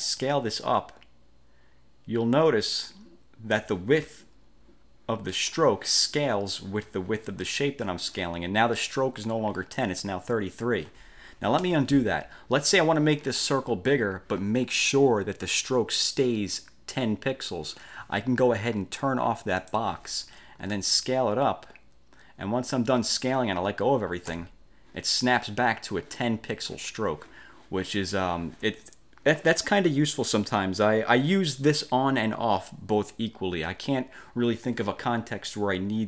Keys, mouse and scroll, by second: 0.3-3.9 ctrl+shift+drag, 11.7 ctrl+z, 19.7 click, 21.1-24.6 ctrl+shift+drag.